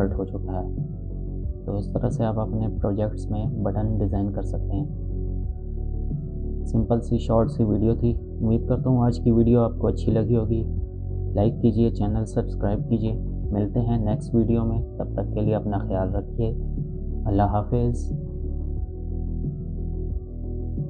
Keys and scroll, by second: 2.4 space, 7.7 space.